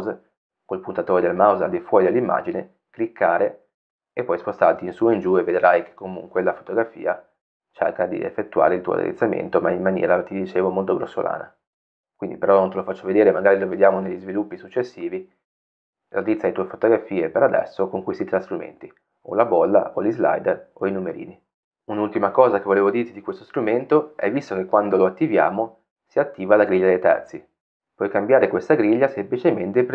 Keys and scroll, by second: 29.3 o.